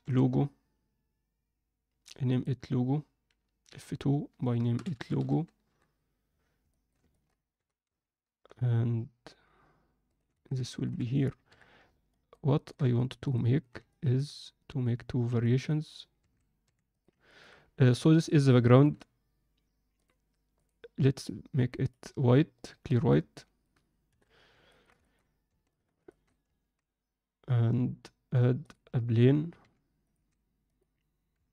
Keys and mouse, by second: 0.0 2, 2.3 click, 3.6 F2, 6.7 shift+middle click, 7.1 ctrl+alt+middle click, 7.5 g, 10.5 ctrl+alt+z, 10.7 ctrl+alt+middle click, 11.5 KP_7, 12.1 ctrl+alt+middle click, 12.5 ctrl+middle click, 13.0 ctrl+alt+middle click, 13.9 ctrl+alt+middle click, 15.5 click, 16.1 s, 17.3 ctrl+alt+middle click, 17.9-18.2 alt+middle drag, 18.6 alt+shift+middle click, 19.9-23.1 drag, 23.3 middle click, 24.0 KP_1, 24.7 ctrl+alt+middle drag, 25.0 alt+shift+middle drag, 25.7 shift+right click, 26.1 alt+shift+middle click, 26.5 shift+a, 29.6 r, 30.1 s, 31.3 KP_7.